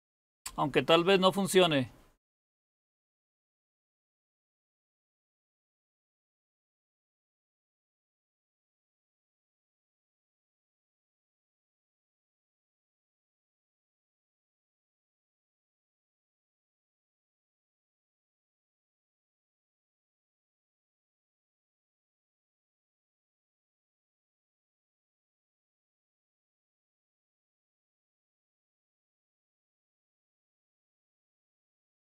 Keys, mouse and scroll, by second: 2.4 Return, 8.1 s, 9.1 Return.